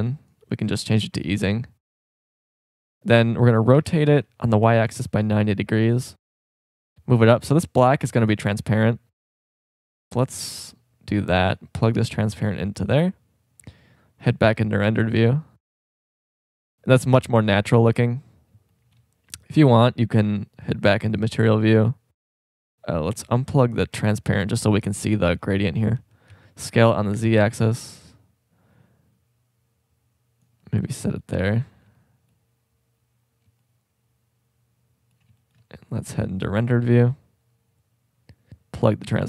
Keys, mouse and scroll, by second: 0.0-2.0 drag, 3.0 right click, 3.7 r, 6.3 click, 10.1 middle click, 11.5-13.4 drag, 17.0-18.0 middle drag, 18.9 scroll up 2, 20.4 click, 21.2 click, 23.2-25.1 drag, 26.0 s, 28.0-28.4 drag.